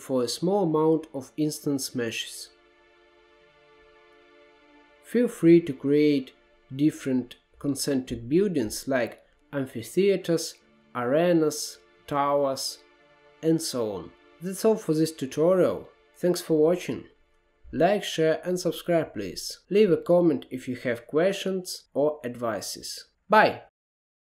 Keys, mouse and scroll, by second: 5.8-6.3 scroll down 4, 6.4-8.7 middle drag, 8.7-9.4 scroll up 3, 9.4-11.9 middle drag, 11.9 drag, 12.7-15.7 middle drag, 17.4-19.8 middle drag, 19.8-20.7 scroll up 2, 20.7-21.0 scroll down 2, 21.0-23.4 middle drag, 23.4 click.